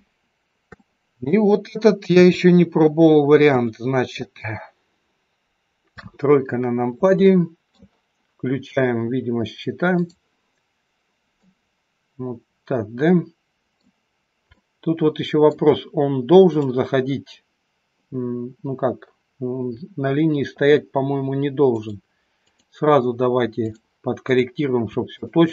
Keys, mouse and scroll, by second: 0.8 shift+middle click, 2.1 KP_3, 3.4 KP_1, 4.3-5.2 scroll down 2, 5.9 KP_3, 6.5-7.2 scroll down 2, 7.3 shift+middle click, 10.0 click, 11.4 middle click, 14.5 middle click, 16.5 click, 21.7 click, 25.0 click, 25.3 shift+click.